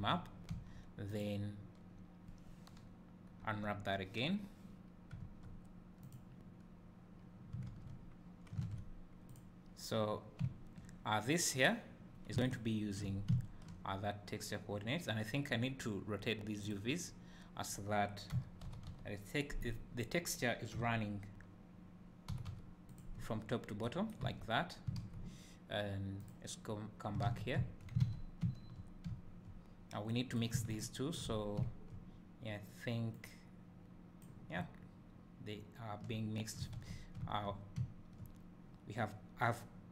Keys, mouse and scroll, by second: 0.0 Tab, 0.5 a, 1.1 drag, 3.7 u, 5.3 Tab, 6.1 click, 8.7 alt+a, 9.5 click, 12.6 ctrl+shift+click, 13.3 `, 16.9 click, 18.4 r, 19.8 right click, 20.9 r, 23.1 click, 23.5 scroll up 1, 24.4 Tab, 26.3 click, 27.6 `, 28.2 a, 30.1-30.8 drag, 31.6 `, 33.2-35.0 drag, 34.6 `, 35.4-39.9 drag.